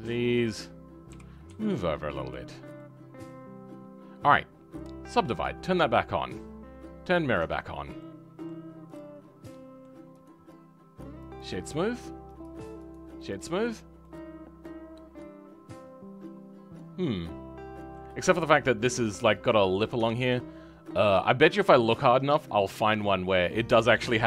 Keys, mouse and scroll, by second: 0.3 click, 1.1 g, 2.7-5.3 middle drag, 5.3 click, 5.6-7.0 scroll down 6, 7.0 click, 7.7 scroll down 4, 8.0 middle click, 8.9 click, 9.1-9.5 scroll up 2, 9.5-12.4 middle drag, 12.4 click, 13.3 right click, 13.7 scroll down 3, 14.0-17.2 middle drag.